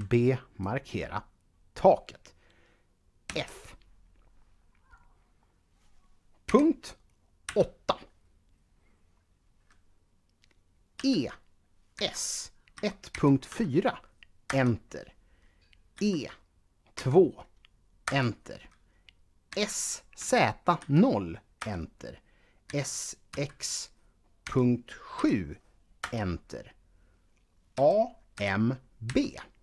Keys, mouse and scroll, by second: 0.4 click, 3.0 f, 6.3-7.3 typing, 10.7-13.2 typing, 14.2 Return, 15.8-16.8 typing, 17.9 Return, 19.3-20.5 typing, 21.4 Return, 22.4-23.1 typing, 24.2-24.9 typing, 25.8 Return, 27.6-28.9 typing.